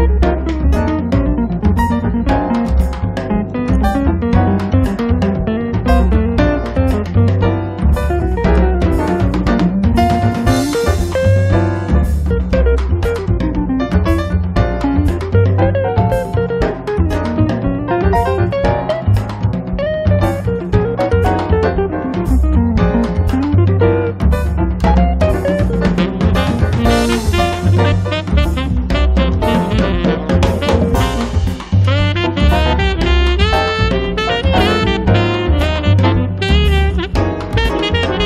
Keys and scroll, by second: 0.0 ctrl+z, 1.1-3.0 typing, 4.6 m, 6.4 1, 6.8 5, 7.1 Return, 8.0 p, 9.4 5, 9.7 Return, 10.2 space, 11.1 Escape, 16.2 r, 17.9 5, 18.4 /, 18.8 5, 19.1 Return, 20.2 space, 25.8 m, 27.9 2, 28.3 5, 28.7 Return, 29.9 x, 30.5 6, 30.7 Return, 33.3 space.